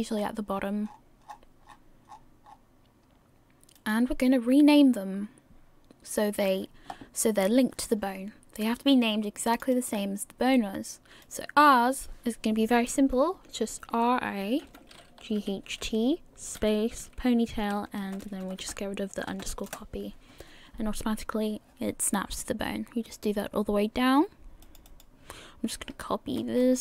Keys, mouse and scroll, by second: 0.9-1.3 scroll down 31, 2.5 scroll down 19, 3.8 click, 3.8 scroll down 1, 4.1-5.6 scroll up 1, 5.6-6.6 scroll up 1, 9.5 click, 9.7 click, 18.2 BackSpace, 18.6 BackSpace, 24.6 click, 24.9 click, 26.6 ctrl+c.